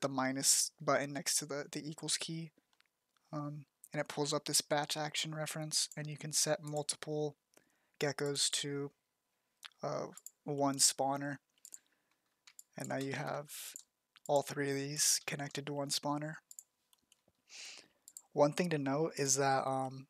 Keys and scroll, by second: 12.1 z, 12.7 ctrl+z.